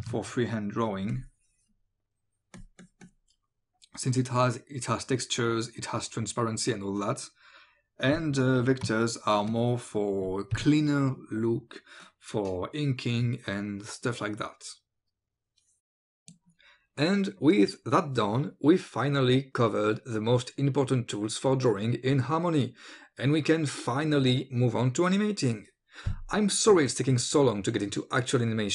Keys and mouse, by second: 0.0 ctrl+z, 0.6 click, 2.6 click, 9.1 ctrl+click, 16.3 click, 16.5-25.0 typing, 16.6 click, 17.2 click, 17.9 click, 18.1 ctrl+alt+space, 19.0 click, 19.1 ctrl+r, 19.3 click, 19.6 click, 19.9 click, 20.7 click, 21.0 click, 21.3 click, 21.7 click, 22.1 click, 22.6 click, 22.7 click, 22.9 ctrl+z, 23.0 click, 23.1 click, 23.4 click, 23.7 click, 23.9 click, 24.3 click, 24.4 click, 24.9 click, 25.1 click, 25.2 click, 25.7 click, 26.0 ctrl+click, 26.5-28.7 typing, 26.6 click, 26.8 click, 27.0 click, 27.5 click, 28.1 click, 28.2 ctrl+z, 28.2 click, 28.4 ctrl+z, 28.5 click, 28.6 click.